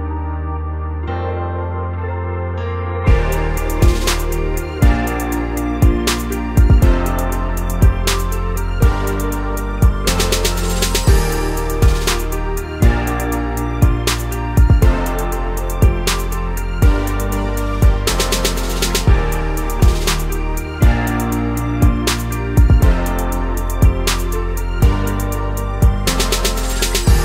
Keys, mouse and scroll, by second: 1.7 KP_Enter, 3.1 click, 3.7 shift+click, 4.3 shift+click, 4.4 shift+click, 6.1-7.9 middle drag, 7.1 i, 7.5 KP_Enter, 7.9 click, 8.1 shift+click, 8.6 i, 8.9 KP_Enter, 9.5 click, 9.9 i, 10.3 KP_Enter, 10.8 shift+click, 11.2 i, 11.5 KP_Enter, 12.5 shift+click, 12.6 shift+click, 13.0 shift+click, 13.2 shift+click, 13.3 shift+click, 13.4 shift+click, 13.6 shift+click, 13.8 shift+click, 13.9 shift+click, 14.1-20.0 middle drag, 15.2 ctrl+i, 15.6 x, 20.0 click, 20.3 middle click, 20.6 click, 20.7-21.7 drag, 22.4 click, 23.0 drag, 23.1-24.3 middle drag, 23.8 scroll down 2, 24.0 scroll up 2, 24.3 click, 24.6 Tab, 24.8 scroll down 2, 24.9 a, 25.3-27.2 middle drag, 25.6 ctrl+b, 27.0 Escape.